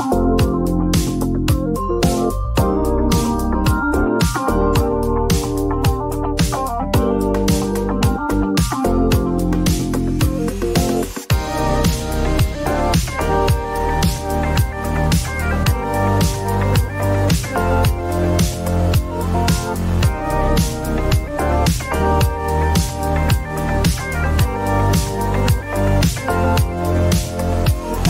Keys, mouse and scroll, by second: 1.1 typing, 1.3 click, 2.8-3.1 typing, 3.7 Return, 4.6 typing, 5.1 click, 7.1 click, 9.1-10.4 typing, 9.9 Return, 12.3 click, 12.9 click, 14.7 click, 15.2 click, 17.3-18.4 typing, 18.0 Return, 19.6 click, 21.9 click, 22.9-23.3 typing, 23.9 Return, 24.9-25.7 typing, 27.1 click, 27.1 typing.